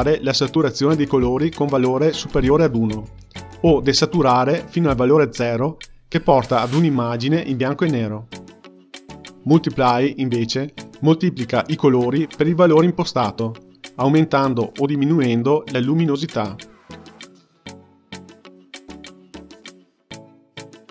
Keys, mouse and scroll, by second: 4.5-10.2 drag, 10.7-20.9 drag.